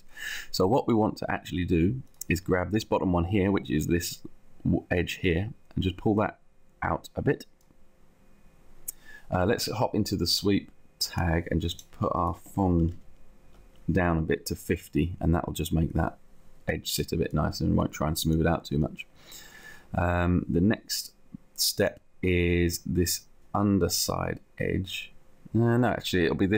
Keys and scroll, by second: 12.9 shift+v, 14.5 shift+Down.